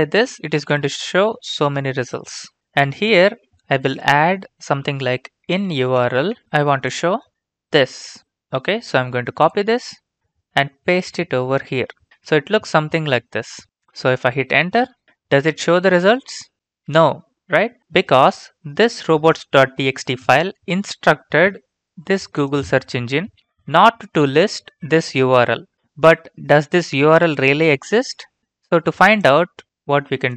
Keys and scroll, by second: 0.7 Return, 3.8 space, 5.3-6.8 typing, 10.9 ctrl+v, 14.7 Return.